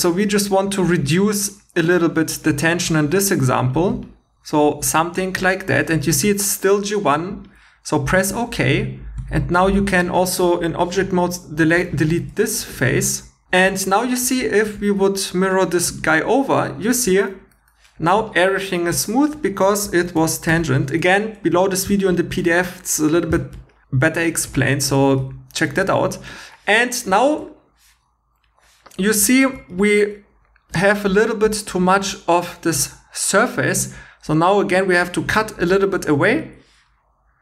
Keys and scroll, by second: 2.9 d, 9.2 Tab, 11.6 x, 12.5 shift+e, 14.5 super+x, 20.2 super+z, 29.1 2, 32.0 shift+e.